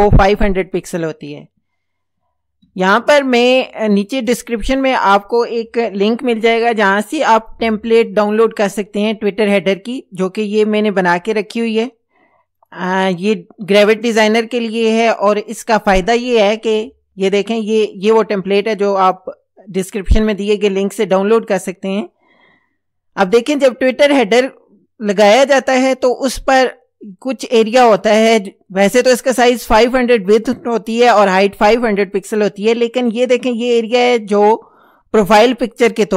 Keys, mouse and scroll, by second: 3.0 ctrl+scroll down 2, 7.8 ctrl+o, 12.6 click, 17.5 ctrl+scroll down 2, 20.4 click.